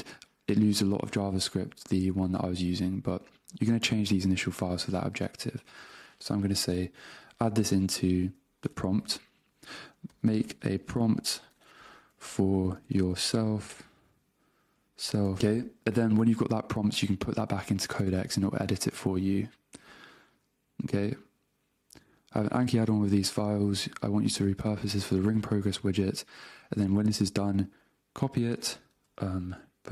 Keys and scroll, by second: 7.5 super+Tab, 10.4-13.2 typing, 13.8 alt+BackSpace, 15.4 Return, 29.1 super+Tab.